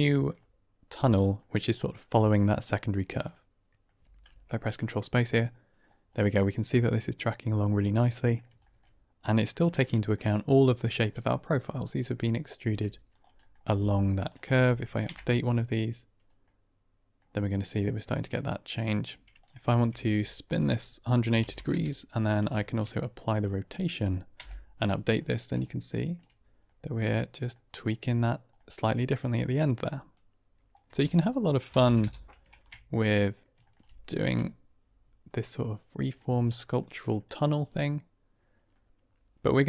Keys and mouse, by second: 0.4-1.2 drag, 1.3-1.9 drag, 3.2-3.7 drag, 4.0 ctrl+space, 4.7-6.0 drag, 7.7-8.2 middle drag, 9.5 shift+middle drag, 9.8 middle drag, 12.0 click, 12.5 Tab, 13.0 click, 13.3 middle click, 13.6 g, 14.1 click, 15.0 Right, 16.3 middle click, 17.7 middle click, 19.3 Tab, 19.3 ctrl+space, 19.3 click, 19.8 r, 19.9 z, 21.2 KP_1, 21.3 KP_8, 21.4 KP_0, 21.6 KP_Enter, 22.5 ctrl+a, 24.3 Right, 25.1 middle drag, 25.6-26.0 shift+middle drag, 26.8 middle click, 27.5 middle drag, 28.4-29.0 middle drag, 29.6 shift+middle click, 30.0-30.8 middle drag, 30.8-31.7 typing, 31.9 KP_Enter, 32.4 ctrl+a, 33.5 shift+click, 34.2 Right, 35.3-36.0 drag, 36.9 click, 37.3-38.7 middle drag.